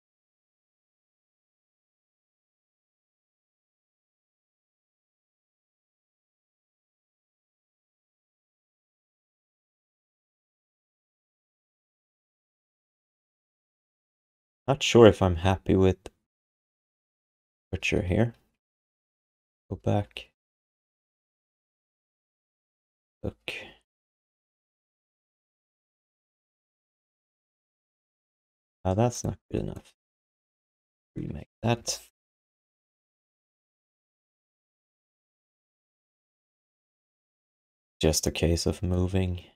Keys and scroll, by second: 17.5 z, 17.7 z, 18.4 ctrl+z, 18.6 ctrl+z, 18.7 ctrl+z, 19.0 ctrl+z, 19.3 ctrl+z, 19.6 ctrl+z, 19.8 ctrl+z, 20.0 ctrl+z, 20.1 ctrl+z, 20.3 ctrl+z, 20.5 ctrl+z, 20.7 ctrl+z, 20.9 ctrl+z, 21.1 ctrl+z, 21.3 ctrl+z, 21.5 ctrl+z, 21.7 ctrl+z, 21.9 ctrl+z, 22.0 ctrl+z, 22.2 ctrl+z, 22.4 ctrl+z, 22.6 ctrl+z, 22.8 ctrl+z, 23.0 ctrl+z, 23.2 ctrl+z, 23.4 ctrl+z, 23.6 ctrl+z, 23.8 ctrl+z, 24.0 ctrl+z, 24.2 ctrl+z, 24.4 ctrl+z, 24.6 ctrl+z, 24.7 ctrl+z, 24.9 ctrl+z, 25.3 ctrl+z, 25.7 ctrl+z, 27.4 q, 30.0 q, 32.9 f, 35.8 alt+q, 37.7 w.